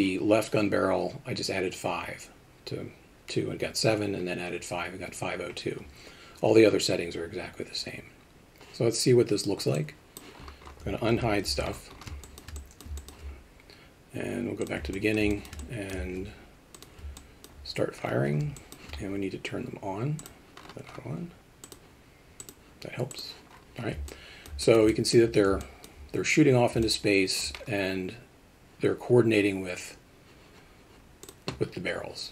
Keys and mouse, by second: 9.7 click, 11.1 alt+h, 11.5 alt+a, 12.3 alt+shift+middle drag, 12.6 alt+middle drag, 13.0 alt+shift+middle click, 14.9 alt+middle drag, 15.3 alt+shift+middle drag, 15.6 alt+middle drag, 17.2-17.5 middle drag, 18.6 alt+shift+middle drag, 20.2 click, 21.6 click, 22.4 click, 23.1 click, 24.1-24.5 alt+middle drag, 24.6 alt+shift+middle drag, 24.9 alt+middle click, 25.6 alt+middle click, 26.8-27.4 alt+middle drag, 31.2 click.